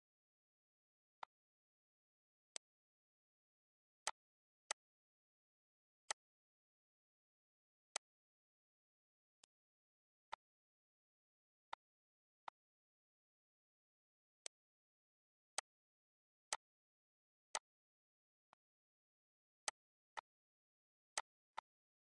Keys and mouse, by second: 1.0 click, 1.8 Delete, 2.4 click, 3.9 click, 5.8 click, 7.8 click, 8.6 Delete, 9.2 click, 10.1 click, 11.5 click, 12.2 click, 13.7 Delete, 14.3 click, 15.4 click, 16.3 click, 17.3 click, 18.3 click, 19.5 click, 21.0 click.